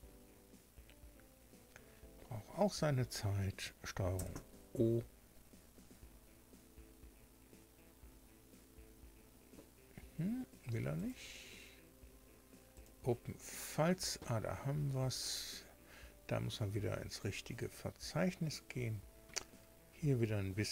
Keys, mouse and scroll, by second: 4.1 ctrl+o, 10.9 click, 12.7 click, 17.1 click.